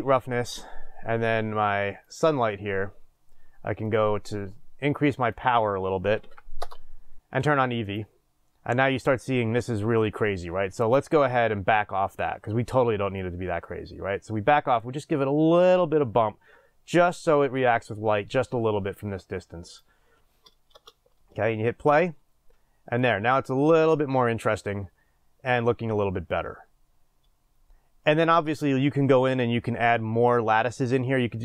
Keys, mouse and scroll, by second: 6.6-8.1 drag, 6.7 Return, 13.4-31.4 drag, 20.7 space, 28.4 space.